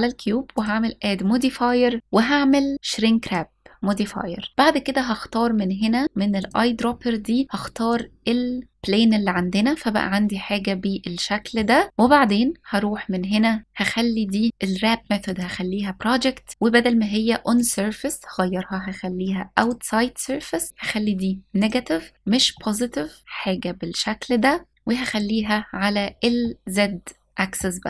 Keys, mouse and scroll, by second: 0.2-3.0 drag, 6.0 click, 9.0-11.2 middle drag, 13.6 click, 17.2-19.5 drag, 21.2 click, 22.2-24.4 middle drag, 24.7-26.1 drag, 26.1-27.2 middle drag.